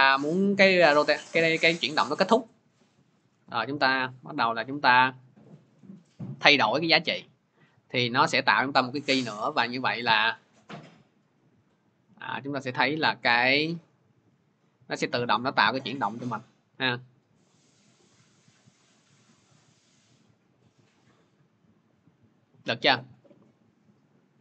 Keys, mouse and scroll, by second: 0.9-7.0 drag, 9.5 click, 22.4 click.